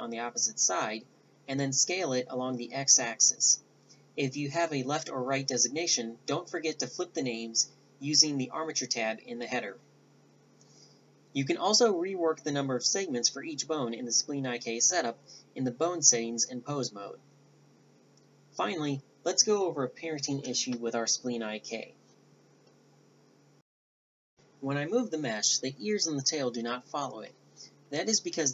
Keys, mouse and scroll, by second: 1.1 a, 1.6 middle click, 10.3-11.0 drag, 16.6 click, 17.3 middle click, 17.8 click, 24.1 Tab, 24.1 g, 25.4-25.7 drag, 25.7 g, 26.9 a, 27.7-28.5 drag.